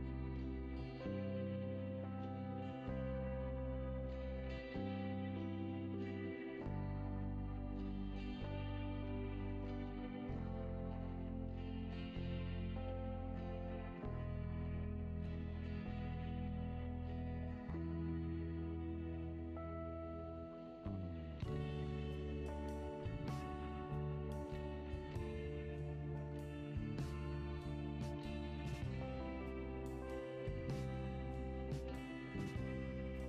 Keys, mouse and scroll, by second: 0.1 click, 1.0 click, 2.4 click, 3.1-5.1 drag, 7.5 drag, 8.6 click, 9.6-10.9 scroll down 5, 10.9 click, 11.7 click, 14.0 click, 14.6 Tab, 15.3 click, 16.8 click, 17.6 alt+click, 19.6 click, 20.2 scroll up 2, 21.7 click, 23.3 alt+click, 24.4 alt+click, 25.7 shift+click, 26.9 drag, 28.0 drag, 29.0 drag, 29.6 click, 30.0 click, 30.3 click, 31.2-32.5 drag, 32.5 n.